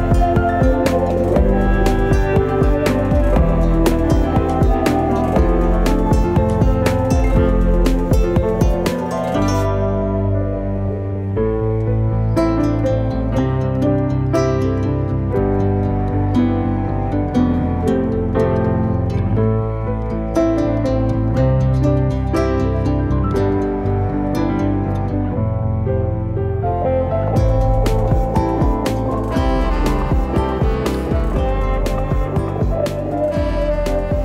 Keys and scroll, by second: 1.0-2.4 typing, 7.3-8.3 typing, 10.4-11.1 typing, 16.8 F10, 19.6-24.1 typing, 24.6 Return, 31.0-32.3 typing.